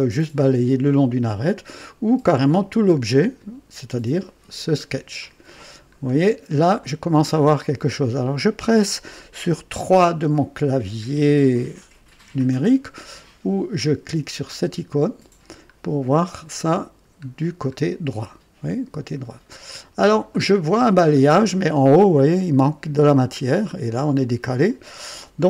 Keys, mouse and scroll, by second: 2.4 click, 4.6 click, 5.9-6.2 scroll down 2, 6.8-7.5 drag, 14.4 click, 15.6-16.0 scroll up 1, 16.2-17.2 right drag, 19.2 scroll down 1, 19.6-20.4 right drag, 20.5 scroll up 1, 21.1 scroll down 1, 21.5 right click, 22.1-22.5 scroll up 2, 23.3-23.7 scroll down 1.